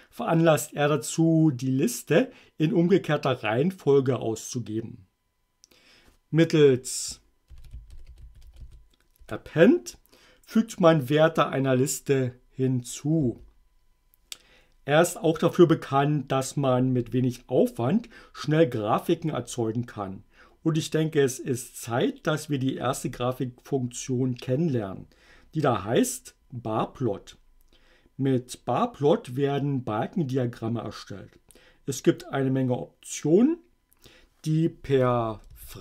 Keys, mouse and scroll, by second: 7.5-9.2 typing, 9.3 shift+Return, 13.3 q.